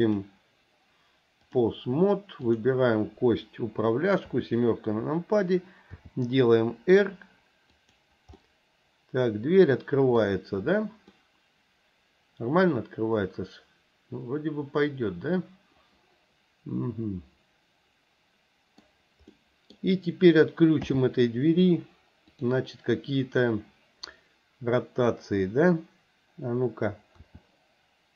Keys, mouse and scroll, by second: 0.1-1.7 drag, 2.5 click, 4.3 KP_7, 6.0 r, 8.4-10.2 middle drag, 11.2-18.8 middle drag, 19.4-19.8 middle drag, 20.8 n, 22.3 click, 27.2 r.